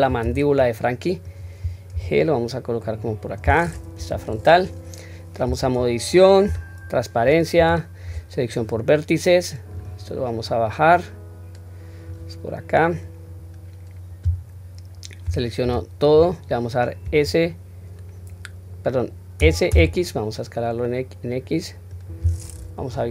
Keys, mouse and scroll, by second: 4.0 KP_1, 4.6-4.9 scroll up 1, 5.4 Tab, 5.4-6.4 scroll up 1, 6.4 q, 7.6 1, 8.5 click, 10.9-12.1 drag, 12.7-13.4 drag, 15.6 a, 22.8 KP_3.